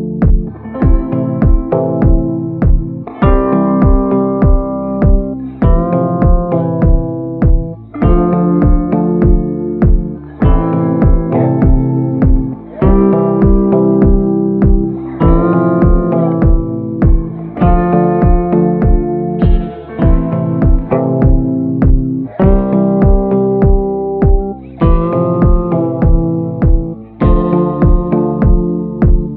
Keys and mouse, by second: 0.6 ctrl+z, 1.1 ], 1.2 ], 1.2 ], 1.3 ], 1.4 click, 2.8-4.4 typing, 3.1 click, 3.6 ctrl+z, 3.8 click, 4.5 click, 5.4 ctrl+z, 5.5 ctrl+z, 6.0 [, 6.3 [, 6.4-7.5 drag, 6.4 [, 8.7 middle click, 9.5 middle click, 9.9 middle click, 10.4 shift+middle click, 11.6 middle click, 12.7 middle click, 14.8 shift+middle click, 15.2 shift+middle click, 15.8 shift+middle click, 16.2 middle click, 17.0 ctrl+i, 17.5 b, 18.2 b, 18.9 b, 19.8 b, 21.5 click, 22.0 click, 23.0-23.6 ], 23.6-26.3 drag, 29.1 [.